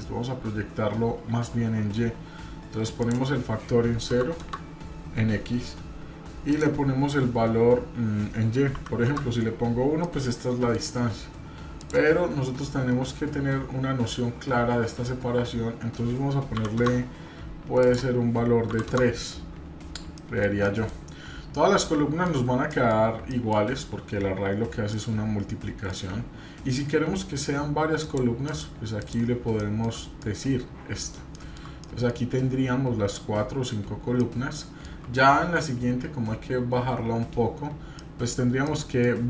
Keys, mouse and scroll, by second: 3.0-5.4 drag, 6.5-9.6 drag, 10.0 middle click, 11.8-19.4 drag, 20.0 shift+middle click, 20.6 middle click, 21.8 middle click, 22.7-23.0 shift+middle drag, 23.3-23.6 middle drag, 23.6 scroll down 1, 24.9 middle click, 28.0 click, 28.5 click, 29.0 click, 29.5 shift+middle click, 29.9 scroll down 1, 30.2-31.2 middle drag, 31.8 middle click, 34.2 shift+middle click, 36.3-37.8 middle drag, 37.9-38.4 shift+middle drag, 38.6 middle click.